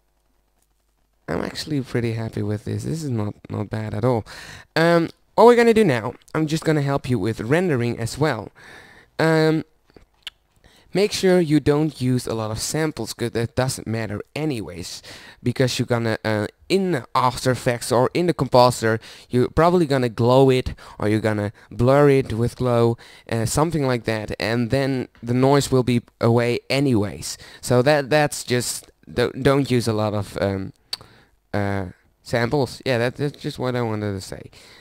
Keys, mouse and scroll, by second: 2.2-4.1 middle drag, 4.1 z, 5.4-7.2 drag, 7.6-13.3 drag.